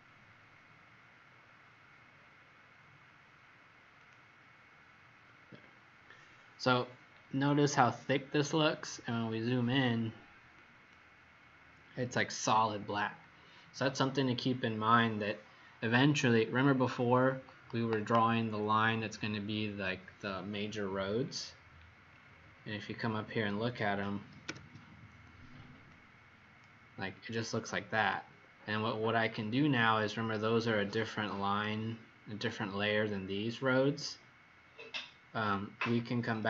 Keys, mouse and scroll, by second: 0.7-1.2 scroll up 3, 1.2 scroll down 1, 2.0-2.8 scroll up 1, 3.9 click, 5.3-6.6 scroll up 8, 6.6-8.2 scroll down 4, 9.6 click, 21.3-22.1 alt+scroll down 4, 22.0 scroll, 22.1-22.7 scroll up 21, 25.8 click.